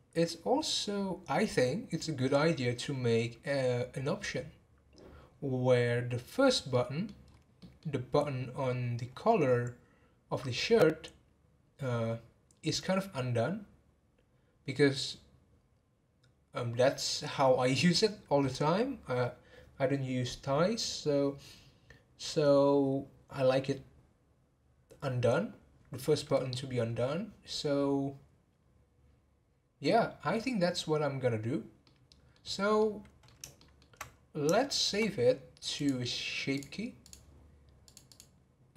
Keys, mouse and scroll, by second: 6.7-7.2 middle drag, 7.2 scroll up 4, 7.6-10.8 middle drag, 31.8-32.4 middle drag, 32.4 scroll down 2, 32.8-35.8 middle drag, 35.8-37.1 drag, 37.8 click, 38.1 click.